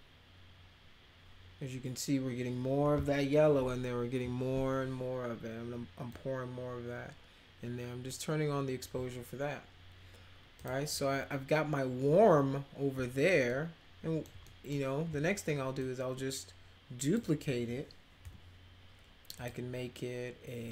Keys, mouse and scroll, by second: 6.1-8.8 drag, 10.6 click, 13.5 alt+middle click, 14.5 middle click, 15.8-17.1 shift+drag, 18.2 e, 19.3 click.